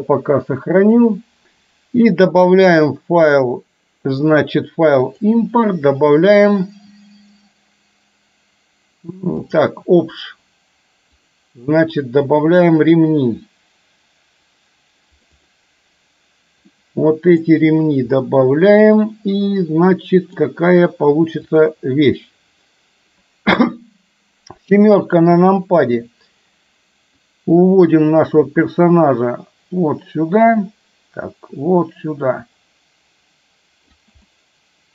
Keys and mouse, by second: 2.5-9.8 drag, 16.8-17.5 middle drag, 18.2-20.4 middle drag, 21.5 click, 25.3 KP_7, 27.3-34.0 drag, 34.3-34.9 middle drag.